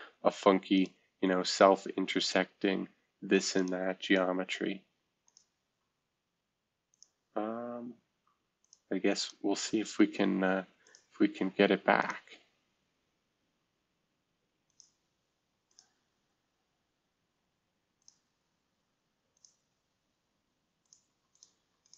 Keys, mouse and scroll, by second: 0.7 click, 1.2-2.5 typing, 3.8-5.6 typing, 7.4 space, 8.0 space, 9.4 space, 10.8 click, 11.1 space, 11.9 click, 12.7 space, 13.4 space, 14.6 click, 17.9 click, 20.1 space, 21.0 space, 21.5 space.